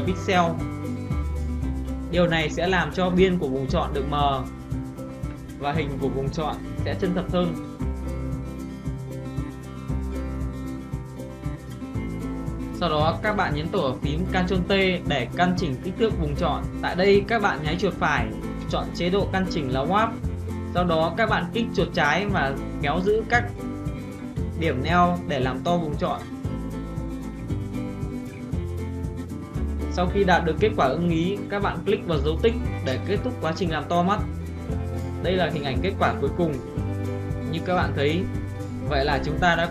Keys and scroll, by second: 14.2 ctrl+t.